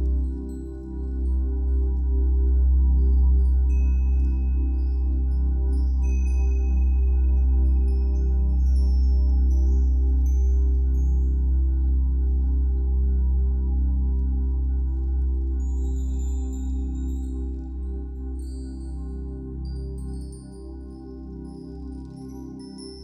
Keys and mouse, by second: 0.9 typing, 3.8 typing, 5.8-16.1 drag, 16.1-16.6 typing, 17.6 click, 18.3 typing, 19.4-20.2 drag, 20.2 typing, 21.0 click, 21.6 ctrl+alt+click, 22.1 alt+click.